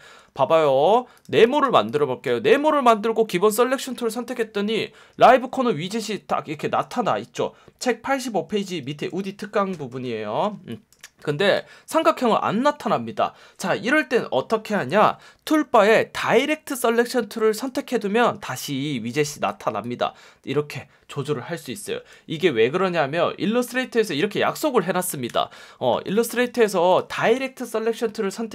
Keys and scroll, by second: 1.4 space, 5.1 F1, 8.9 F1, 10.6 space, 15.6 F1, 18.3 F1, 22.1 super+z, 25.2 v.